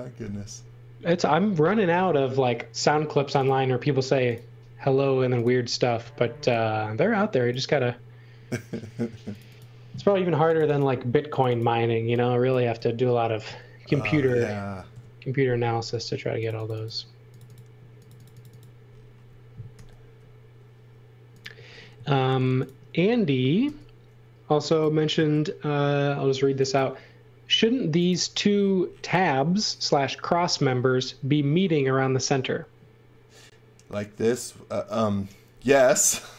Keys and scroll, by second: 2.2 space, 5.9 x, 6.2 v, 8.7 space, 14.8 Delete, 19.7 r, 23.6 r.